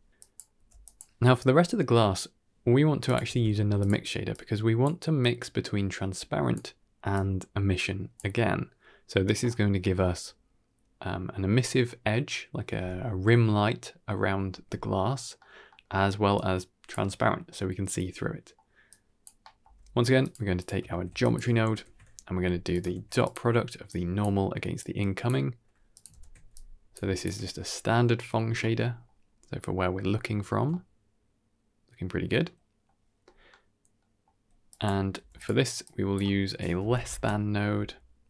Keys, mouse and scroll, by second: 0.1 click, 0.1 middle click, 0.5 g, 2.9 click, 3.1 shift+d, 4.2-4.8 drag, 5.1-6.4 drag, 7.0-8.0 drag, 9.4-9.7 middle drag, 15.3 middle click, 15.7 middle click, 16.2-16.8 drag, 18.1 middle click, 18.8 click, 19.3 middle click, 19.5 click, 19.5 g, 20.5 click, 20.8 shift+d, 21.6 ctrl+h, 22.6 click, 22.8 shift+d, 23.7-24.1 drag, 24.7-25.1 drag, 25.8 click, 26.0 ctrl+h, 26.4-26.9 drag, 27.1 ctrl+shift+click, 28.3 scroll down 1, 28.5-28.9 middle drag, 29.2-29.9 scroll up 2, 30.0 scroll down 2, 30.2 shift+middle drag, 30.6-32.7 middle drag, 33.1 middle click, 33.9 middle click, 34.6 click, 35.0 g, 35.7-38.2 drag, 37.6 s.